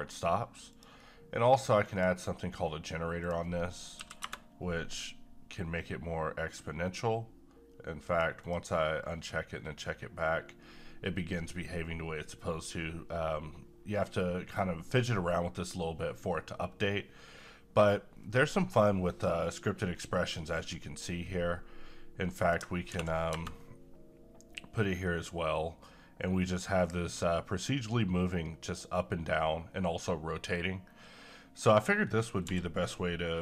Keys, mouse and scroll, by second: 0.7 click, 8.1 click, 22.4 click, 22.4 click, 22.9 ctrl+v, 32.5 n.